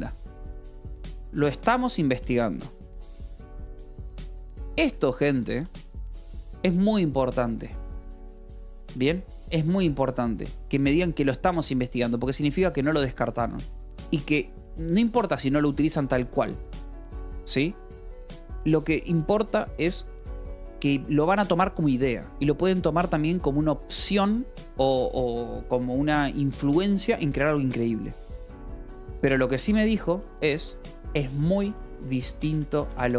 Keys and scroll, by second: 0.4-5.7 typing, 9.7 Escape, 30.3-33.1 typing.